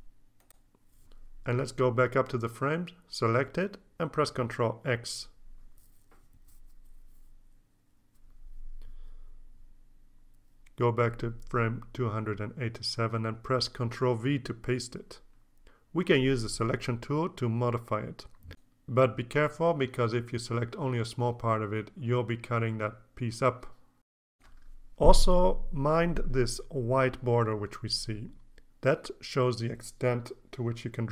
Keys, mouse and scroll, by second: 0.0-1.4 scroll up 5, 1.9 click, 2.8 click, 4.5 ctrl+x, 5.0-6.1 ctrl+scroll down 7, 6.8-7.7 scroll down 6, 9.4 click, 9.6 click, 10.4 click, 11.4 ctrl+v, 14.8 click, 16.0-17.2 drag, 17.7 click, 19.3 ctrl+z, 19.9 ctrl+scroll down 2, 21.2-22.6 drag.